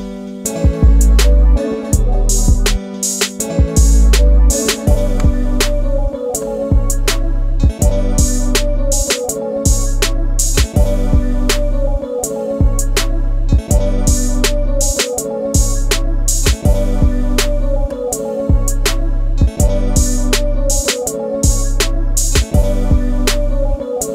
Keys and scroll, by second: 4.5 space, 15.7 space.